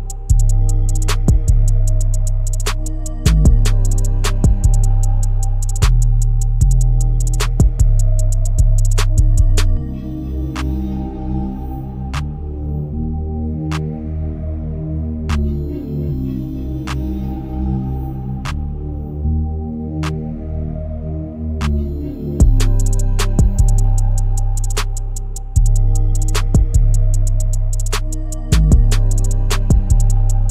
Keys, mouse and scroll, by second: 0.6-1.7 scroll up 2, 1.7-2.8 scroll down 7, 2.8-4.8 scroll up 9, 4.8 e, 11.1 e, 13.7-16.2 middle drag, 16.2 alt+shift+click, 17.4 click, 19.2 2, 20.4 alt+shift+click, 21.6 alt+shift+click, 23.4 KP_1, 24.5 s, 29.0-29.7 scroll down 4, 29.7-30.5 shift+middle drag.